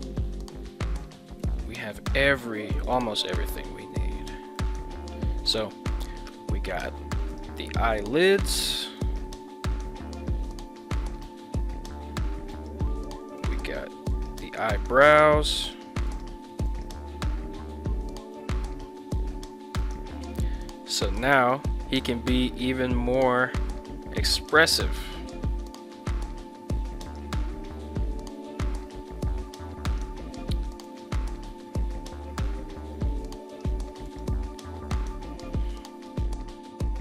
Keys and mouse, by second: 1.4 a, 2.0 click, 2.6 ctrl+Tab, 3.3 a, 4.0 alt+g, 4.6-5.0 drag, 5.6 KP_1, 7.6 right drag, 9.1 right click, 9.9 g, 12.6 right drag, 13.5 right click, 14.2 right click, 14.5 ctrl+Tab, 15.1 right click, 15.6 right click, 16.1 right click, 16.6 ctrl+Tab, 17.6 g, 19.9 right click, 21.2 right click, 21.8 g, 24.5 drag, 25.8 right click, 27.1 right click, 27.4 g, 29.9 drag, 31.1 right click, 31.5 g, 33.6-34.2 drag, 34.5 g, 36.1 click.